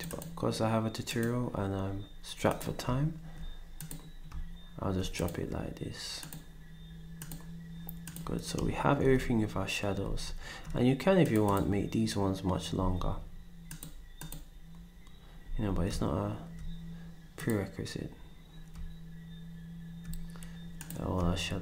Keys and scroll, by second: 10.0 ctrl+shift+s, 12.8 s, 15.4 s.